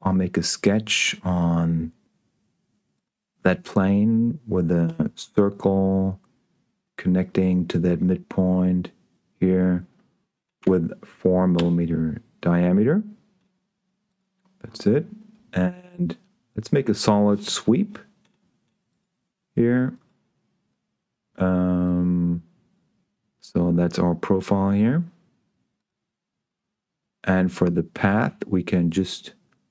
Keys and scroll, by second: 5.1 c, 10.9 4, 11.5 Return.